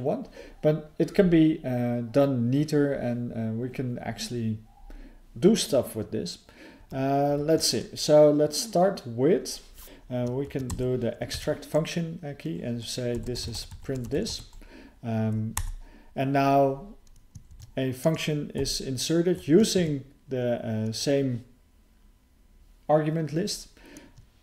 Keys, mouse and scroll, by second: 9.8 Return, 9.8 ctrl+_, 9.8 BackSpace, 15.5 Return, 19.8 Tab.